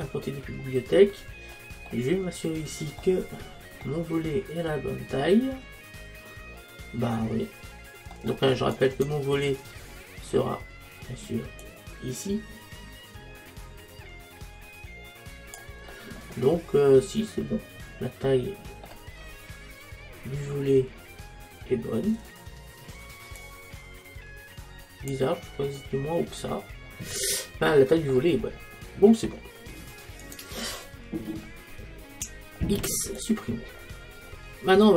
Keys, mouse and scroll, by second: 5.6-8.6 middle drag, 8.8-11.7 right drag, 11.7 click, 16.0-17.9 middle drag, 19.3-21.3 middle drag, 23.4 click, 25.7-28.4 middle drag, 28.4-30.3 middle drag, 30.3-32.6 right drag, 32.6 x, 34.2 middle click.